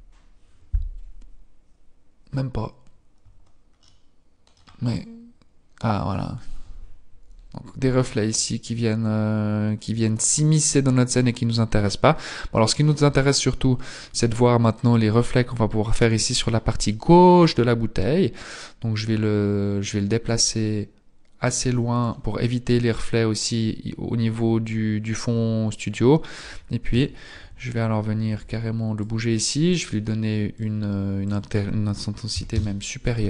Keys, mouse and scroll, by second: 3.9 middle click, 4.9 middle click, 4.9 click, 7.1 click, 10.3-12.1 scroll up 3, 12.1-14.6 scroll up 2, 18.3 click, 22.7-23.3 scroll down 1, 23.3-24.1 scroll down 1, 24.1-24.5 scroll down 1, 24.5 scroll up 1, 25.7-26.7 scroll up 2, 27.0 KP_7, 28.1 g, 30.7 click, 32.7 click.